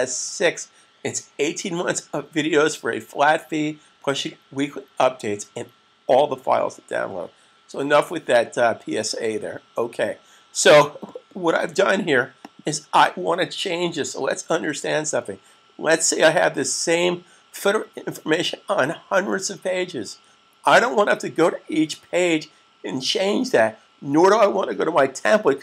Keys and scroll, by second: 13.6 super+s.